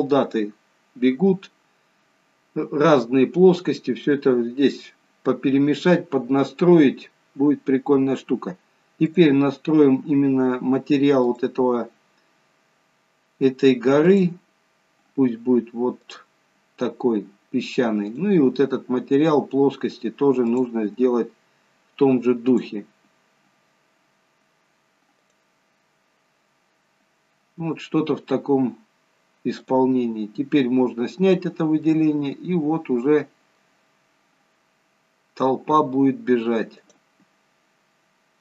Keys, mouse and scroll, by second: 10.1 click, 11.6 click, 18.6 click, 21.0 click, 23.0 click, 27.8-29.4 scroll up 1, 29.5 scroll down 1, 30.1 click, 31.3-31.8 scroll up 1, 32.2 middle click, 34.2 scroll down 1, 34.9 scroll down 1, 37.2 click.